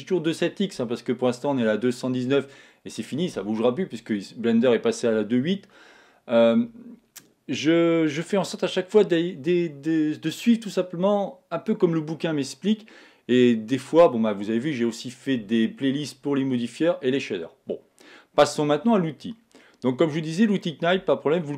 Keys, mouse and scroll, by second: 19.1 scroll up 1, 19.3 middle click, 19.9-20.6 scroll up 1, 20.6-21.5 middle drag.